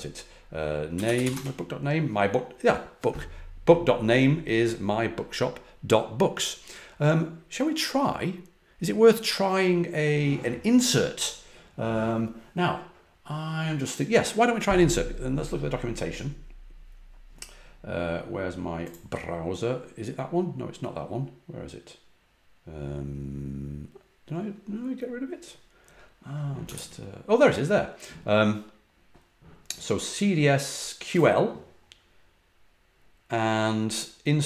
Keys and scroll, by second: 0.6-1.6 typing, 18.9-19.6 typing, 26.7 super+`.